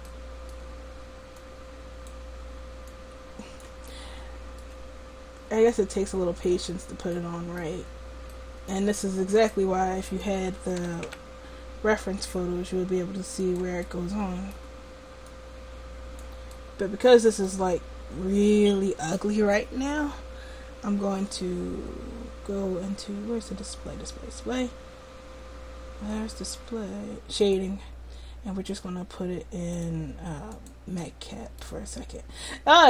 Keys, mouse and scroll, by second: 0.2-1.4 middle drag, 1.4-4.3 drag, 4.0 middle click, 4.4 click, 5.8 click, 10.9 r, 15.3-17.2 drag, 27.5-32.3 drag.